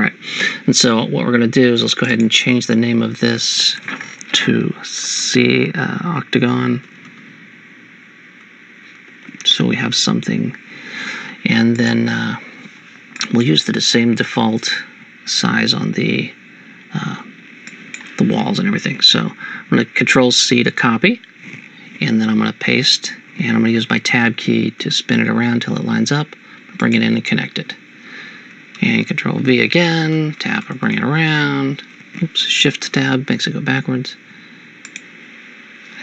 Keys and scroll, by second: 6.8-9.3 typing, 10.3 Return, 20.6 ctrl+c, 22.8 ctrl+v, 24.4 Tab, 24.8 Tab, 29.0 ctrl+v, 30.2 Tab, 30.4 Tab, 30.7 Tab, 30.9 Tab, 32.8 shift+Tab.